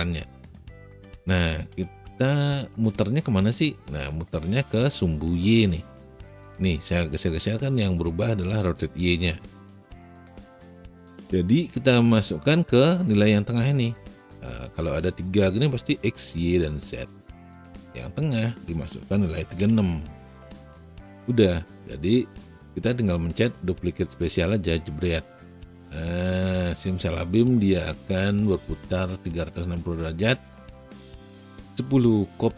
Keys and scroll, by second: 9.9 z, 19.3 KP_3, 19.5 KP_6.